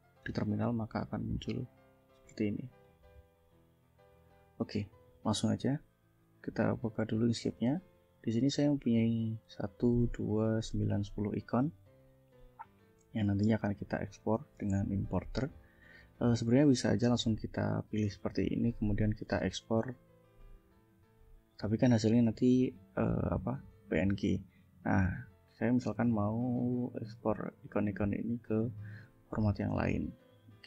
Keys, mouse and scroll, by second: 2.0-3.1 drag, 6.6 click, 7.5 click, 8.2 ctrl+scroll down 2, 8.6 ctrl+scroll up 2, 9.6 click, 10.0 click, 12.4 click, 13.0 ctrl+scroll up 2, 14.9-15.8 ctrl+scroll down 5, 15.9 scroll up 2, 16.3 click, 17.1 click, 17.8-18.9 drag, 19.0 ctrl+click, 20.3 ctrl+shift+e, 25.1 click, 25.5 click, 26.4 click, 27.4 click, 28.3 click, 29.0 click, 29.5 click, 30.2 click.